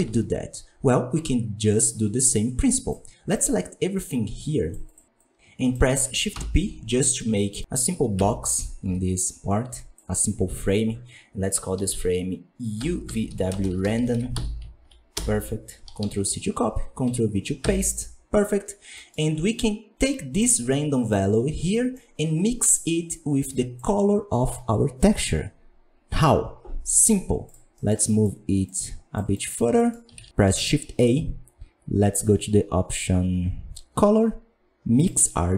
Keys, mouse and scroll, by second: 0.0-0.9 scroll down 4, 7.5 right click, 8.8 n, 17.5 n, 20.3-21.0 drag, 21.2-21.7 scroll down 6, 22.6 click.